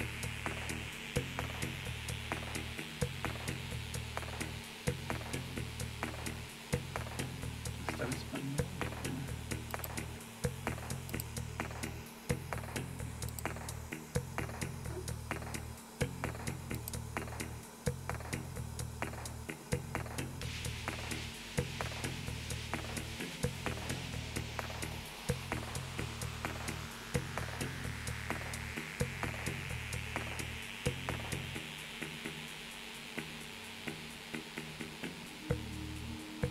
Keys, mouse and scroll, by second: 0.7-1.3 scroll up 3, 3.7-4.4 scroll down 2, 5.0-5.8 scroll down 2, 5.8 scroll up 2, 6.6 scroll up 2, 7.2 scroll up 2, 7.8 scroll up 2, 8.5-9.2 scroll up 2, 9.7 click, 11.1 click, 13.3 click, 16.8 click, 26.9-27.2 scroll down 1.